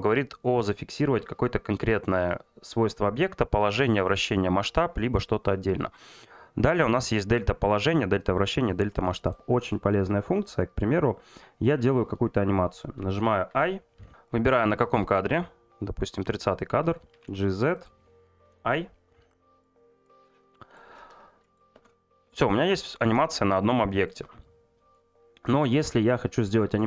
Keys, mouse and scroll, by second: 14.3 click, 15.3 click, 17.8-18.8 drag, 19.7 click, 20.6 middle click, 23.6 click.